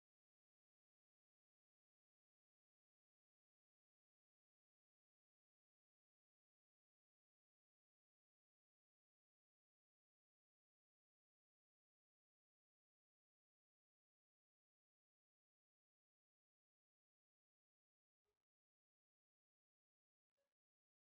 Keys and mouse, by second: 1.9-2.9 middle drag, 4.4 e, 7.0 s, 8.5 KP_1, 12.5 e, 14.1 e, 20.1-21.1 right drag, 20.1 KP_3.